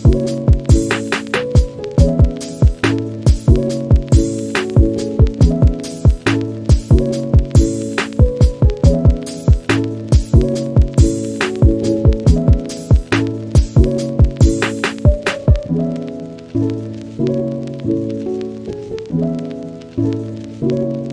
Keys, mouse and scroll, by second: 1.3 middle click, 1.8 scroll up 1, 2.0 middle click, 2.5 middle click, 2.8 click, 3.2 scroll down 1, 3.3-4.5 drag, 4.6 middle click, 4.8 scroll up 1, 5.0 click, 5.3 middle click, 5.5 click, 5.7 scroll down 1, 5.8 click, 6.6 scroll down 1, 6.8 middle click, 6.9-7.4 scroll up 1, 7.4-7.9 drag, 7.9 f, 8.2 click, 8.4 middle click, 8.6 click, 8.8 middle click, 9.0 click, 9.5 middle click, 9.6 scroll up 1, 9.7 click, 10.3 scroll down 2, 10.5 scroll up 3, 10.7 middle click, 10.9 click, 11.1 scroll down 2, 11.2 middle click, 11.3 scroll up 1, 11.4 click, 11.7 scroll down 3, 11.8 scroll up 1, 12.0 click, 12.2 middle click, 12.9 click, 13.4 scroll down 2, 13.5 middle click, 13.9 click, 14.0 scroll up 1, 14.2 click, 14.4-15.8 scroll down 1, 15.8 middle click, 16.2 scroll up 2, 16.9 click, 17.6 f, 17.8 middle click, 18.1 f, 18.4 click, 18.9 scroll down 1, 19.1 click, 19.4 middle click, 19.6 scroll up 1, 19.8 click, 20.3 middle click, 20.6 click, 20.8 scroll down 1, 20.9 middle click.